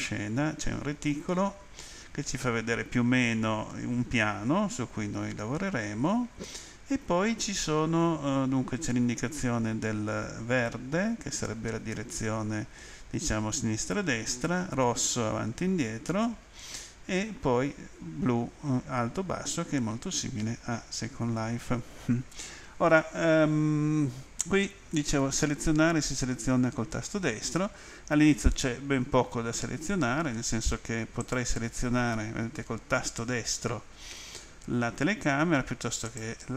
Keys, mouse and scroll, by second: 31.2 right click, 36.1 right click.